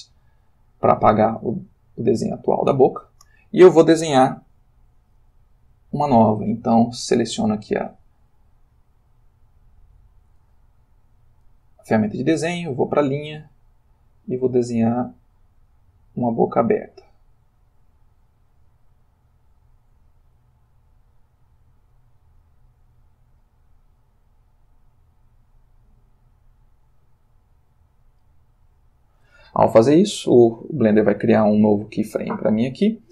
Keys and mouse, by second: 0.3 click, 6.9 click, 8.4 click, 9.8 click, 13.5-28.4 drag.